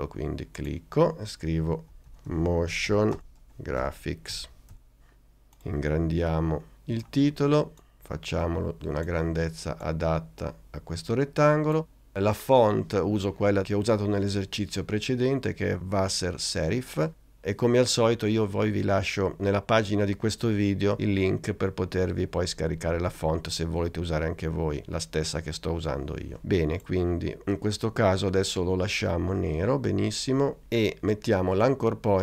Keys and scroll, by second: 1.8-4.9 typing.